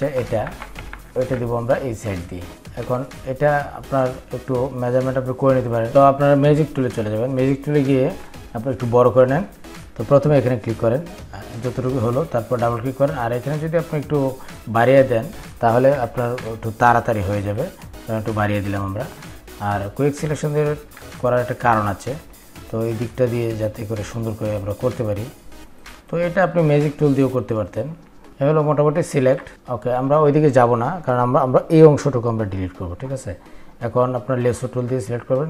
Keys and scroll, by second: 2.0 ctrl+v.